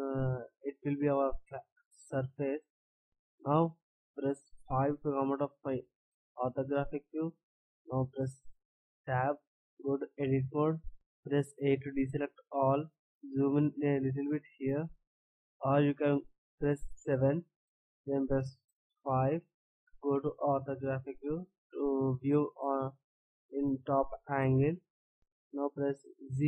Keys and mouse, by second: 7.4 middle click, 9.5 Tab, 11.7 a, 12.9 middle click, 14.0 middle click, 14.7-15.9 middle drag, 17.5 middle click, 19.1 middle click, 20.4 middle click, 20.9-22.9 drag, 25.1-26.1 right drag, 26.1 z.